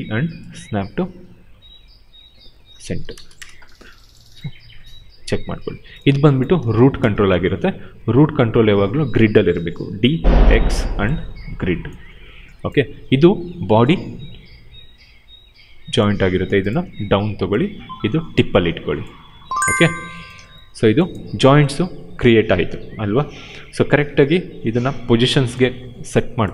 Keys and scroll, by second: 3.0 space, 6.5 space, 9.9 d, 19.2 space.